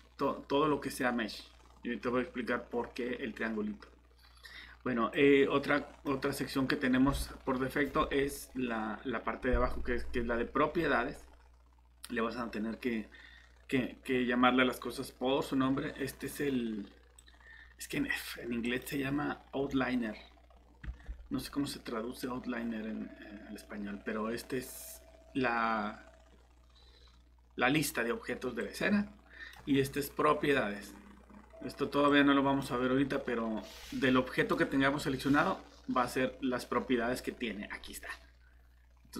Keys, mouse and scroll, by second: 20.8 Escape.